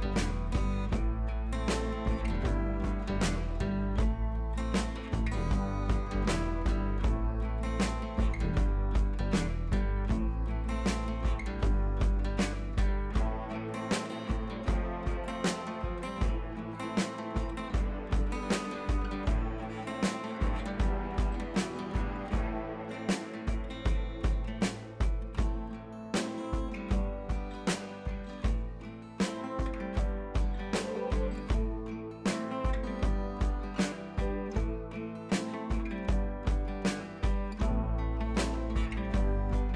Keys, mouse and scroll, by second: 9.2-9.5 drag, 28.7-29.1 scroll up 1, 29.1-30.8 drag, 36.6-38.9 scroll down 1.